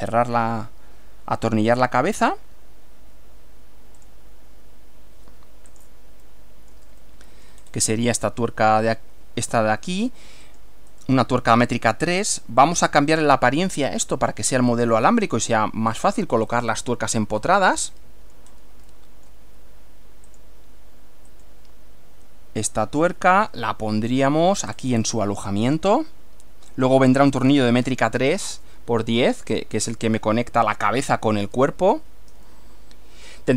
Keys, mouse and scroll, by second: 4.0 click, 5.7 click, 6.3 middle click, 7.1-7.6 shift+middle drag, 7.6-7.9 shift+scroll up 1, 8.3 shift+middle click, 10.5-10.8 scroll down 1, 11.1 right click, 12.9 click, 13.9 click, 14.7 click, 15.9 click, 16.5 click, 17.2 click, 17.9-18.5 shift+middle drag, 18.5 shift+scroll up 1, 18.7 shift+scroll down 1, 18.9-19.5 shift+middle drag, 20.3 click, 21.3 click, 23.0 click, 23.7-24.7 shift+middle drag, 24.7-25.2 shift+scroll up 1, 26.7 click, 27.3-27.8 scroll down 1, 32.5-33.5 shift+middle drag.